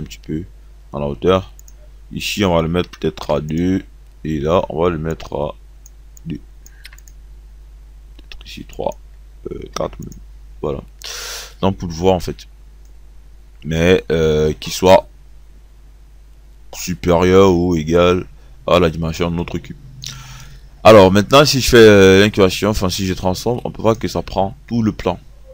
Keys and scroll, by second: 2.5 Delete, 3.2 2, 7.0 2, 9.8 KP_4.